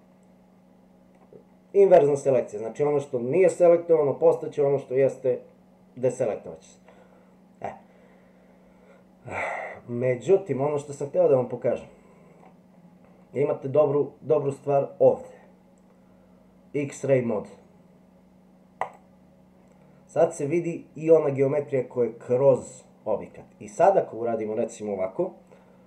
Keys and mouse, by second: 7.0-12.4 middle drag, 18.9 click.